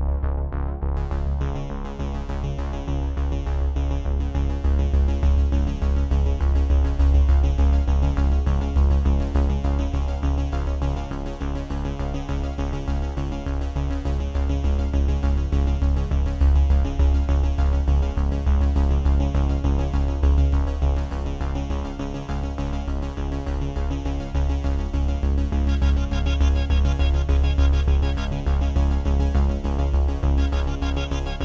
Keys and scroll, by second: 8.3 shift+g, 8.5 shift+i, 8.9 Tab, 17.1 F9.